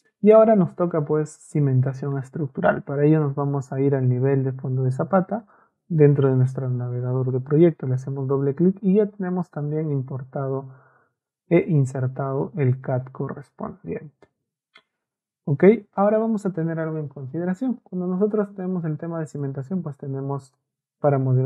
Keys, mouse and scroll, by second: 3.6 click, 5.3 click, 17.3 ctrl+a, 19.4-20.5 ctrl+shift+drag.